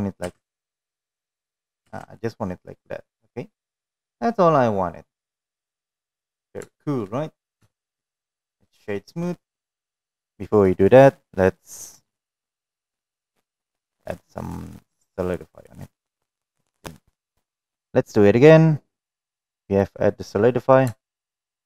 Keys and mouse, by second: 0.3 space, 0.7 space, 2.8-5.6 middle drag, 2.8 space, 6.0-6.7 middle drag, 7.2 shift+middle drag, 8.2 shift+middle drag, 8.7 click, 9.2-11.3 right drag, 13.5 click, 14.8-16.3 drag, 18.7 click, 20.6 shift+middle drag.